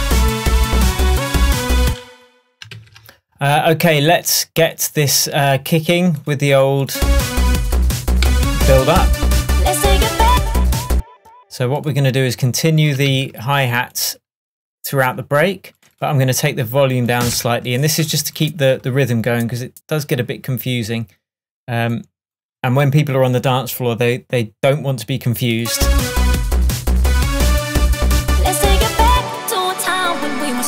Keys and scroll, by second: 1.9 space, 2.7 super+space, 8.4 |, 11.0 space, 17.4 BackSpace, 18.8 super+BackSpace.